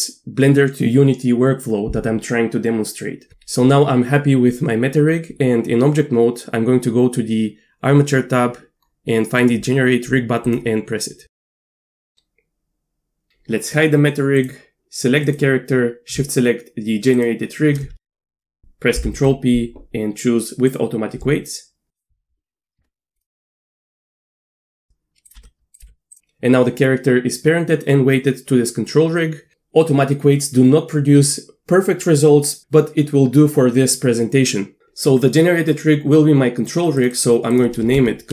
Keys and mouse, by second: 10.5 right click, 14.4 click, 15.3-16.1 drag, 17.9 ctrl+p, 19.0 ctrl+p, 22.8 Tab, 23.1 click, 23.6 click, 24.0 Tab, 24.4 click, 24.7 g, 25.4 r, 25.8 g, 37.0 click, 37.2-38.3 drag.